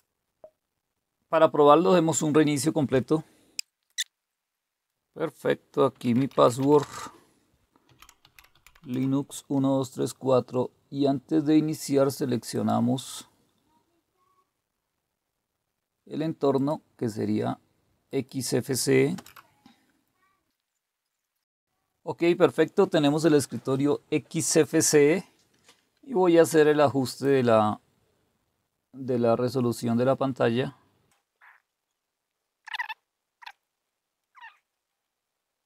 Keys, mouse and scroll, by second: 3.9 Return, 5.7-9.3 typing, 12.5 click, 16.6 click, 18.1 click, 19.1 Return, 27.1 click, 33.5 click, 33.8 click, 34.8 drag.